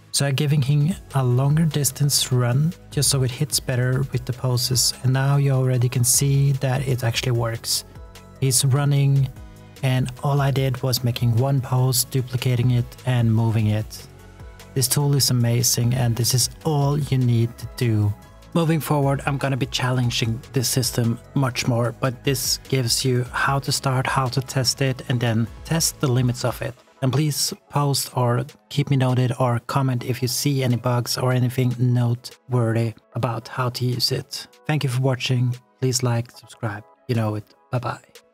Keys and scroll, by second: 1.7 space, 1.9 s, 5.1 space, 15.7 ctrl+s, 16.7-18.6 typing.